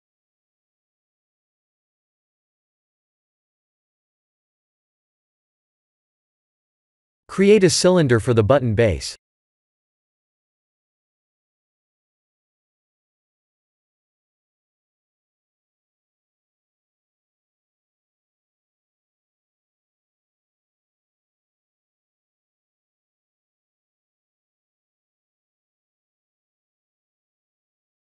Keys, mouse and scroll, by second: 1.9 middle click, 5.7 click, 6.1 middle click, 7.6 shift+a, 14.4 KP_7, 15.2 s, 17.8 g, 21.6-23.1 scroll down 4, 22.0 middle click, 24.2 KP_1, 24.5 KP_7, 25.0-26.0 scroll up 8, 26.1 shift+middle click, 27.2 click.